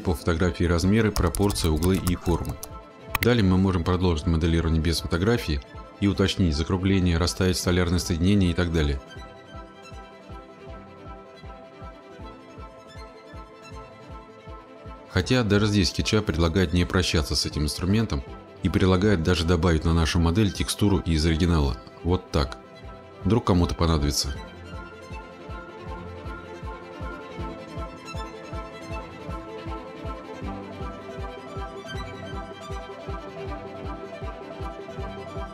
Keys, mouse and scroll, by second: 20.7-21.6 scroll, 22.3 scroll, 24.2 click, 26.5 click, 27.8 click, 29.0 middle click, 29.2 scroll, 34.0 middle click, 34.8 click, 35.1-35.5 scroll.